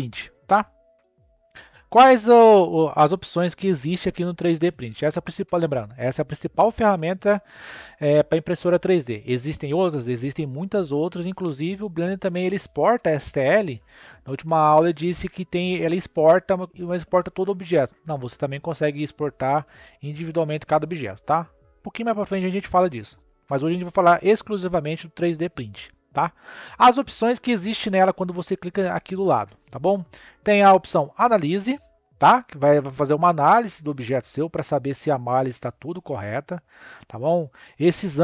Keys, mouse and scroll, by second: 1.7-4.8 drag, 32.0-35.1 drag.